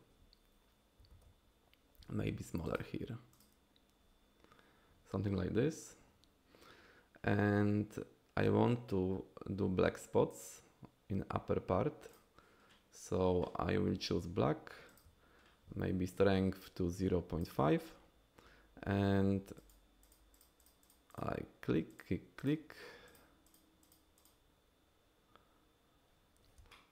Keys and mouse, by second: 1.1 ctrl+z, 2.0 f, 2.7 f, 3.3 click, 14.1 f, 14.9 f, 15.0 f, 16.2-17.5 drag, 19.6 click, 20.0 click, 20.3 click, 20.6 click, 20.8 click, 21.1 click, 21.9 click, 22.4 click, 23.0 click, 23.4 click, 23.8 click, 24.2 click, 26.7 shift+click.